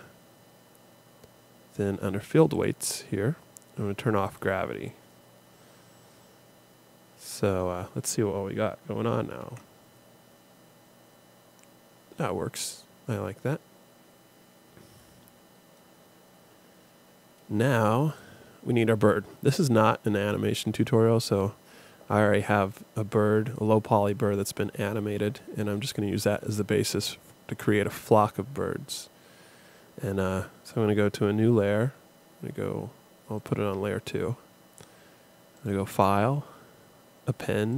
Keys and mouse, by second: 4.2-6.0 drag, 6.0-9.4 middle drag, 9.4 alt+a, 18.2-20.7 drag, 33.4-37.4 drag.